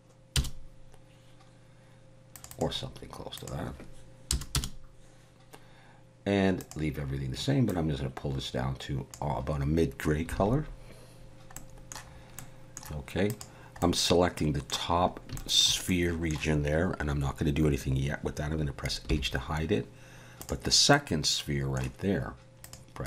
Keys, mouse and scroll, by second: 2.3 click, 2.5 click, 6.6 click, 10.3 alt+a, 11.5 middle click, 12.2 scroll up 1, 12.4 middle click, 13.3 click, 13.8 middle click, 15.0 scroll up 2, 15.3 shift+middle click, 15.9 middle click, 19.1 h, 20.4 click, 20.9 middle click, 22.6 click.